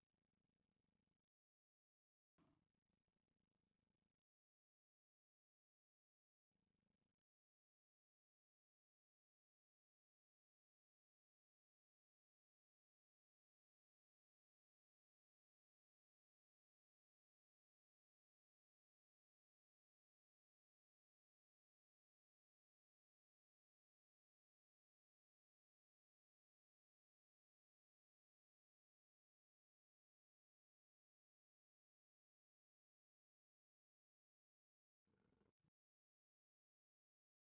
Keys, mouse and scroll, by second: 0.8 ctrl+click, 5.1 click, 7.7 ctrl+click, 21.0-27.0 middle drag, 27.0 click, 32.7 click, 36.6-37.5 drag.